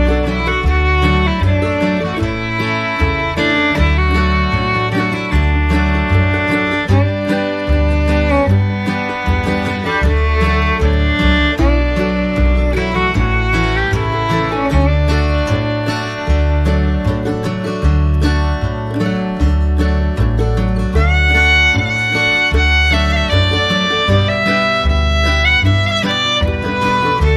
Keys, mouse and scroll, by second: 0.3 ctrl+click, 4.3 ctrl+z, 7.5 ctrl+click, 8.2 ctrl+z, 10.6 ctrl+click, 11.3 ctrl+click, 20.2 ctrl+click, 22.0 ctrl+alt+click, 22.7 ctrl+z, 23.1 ctrl+alt+click, 25.3 ctrl+alt+click.